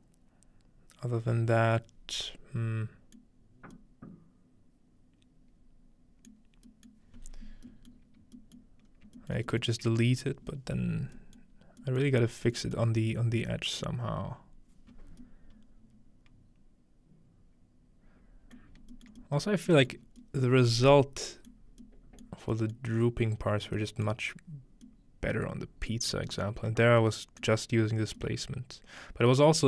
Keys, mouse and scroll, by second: 3.2-3.7 middle drag, 3.6-5.5 scroll down 1, 7.0 middle click, 7.9-8.3 middle drag, 8.6 middle click, 8.9-10.8 scroll up 2, 9.4 middle click, 9.8-11.1 middle drag, 11.2-12.5 scroll up 2, 12.5-13.4 scroll up 1, 13.9-15.2 middle drag, 18.6-18.9 shift+middle drag, 19.0 shift+middle click, 19.9 shift+middle click, 22.2 middle click, 24.1 middle click, 24.5-25.6 scroll down 1, 25.6-26.3 scroll down 1, 26.3 middle click, 26.6 middle click, 26.6-27.8 scroll up 2, 27.5 middle click, 27.8 scroll down 2, 28.7-29.2 scroll down 2.